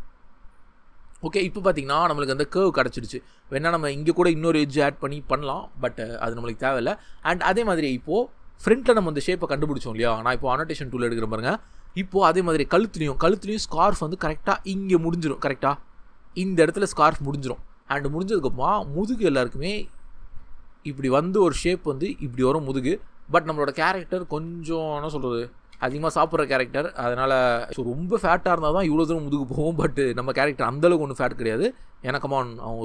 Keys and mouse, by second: 0.3 g, 0.9 click, 20.2 ctrl+z, 22.1-23.2 drag, 23.4 ctrl+z, 24.7 ctrl+z, 29.6 ctrl+z.